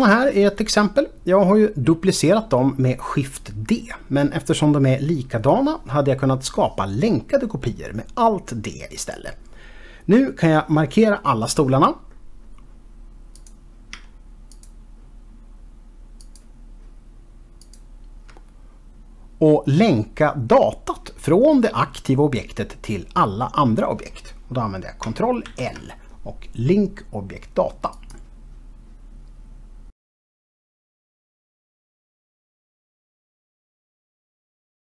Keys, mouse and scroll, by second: 13.4 click, 14.6 shift+click, 16.2 shift+double click, 17.6 shift+click, 29.7 click.